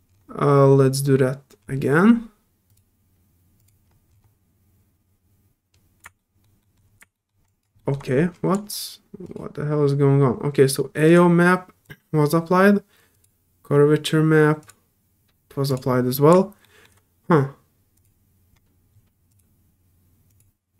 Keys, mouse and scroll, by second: 0.0 scroll down 1, 2.7 click, 3.6 click, 4.1 scroll down 1, 6.2 alt+middle click, 6.6 alt+middle click, 7.1 alt+middle click, 7.4 alt+click, 7.8 alt+middle click, 8.0 scroll down 1, 8.3 alt+middle click, 9.2 alt+click, 11.0 alt+click, 11.8 click, 13.1 click, 14.6 click, 15.7 click, 16.6 alt+middle click, 17.9 alt+click, 19.3 alt+click, 20.3 click.